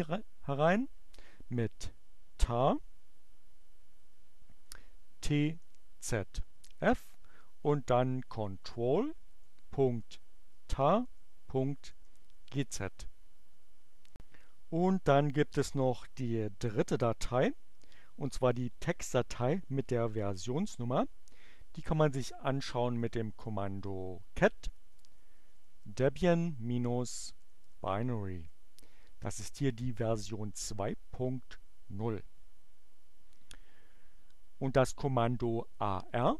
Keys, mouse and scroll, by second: 3.8 t, 5.5-11.8 typing, 20.9 c, 23.1-28.3 typing, 28.4 Return.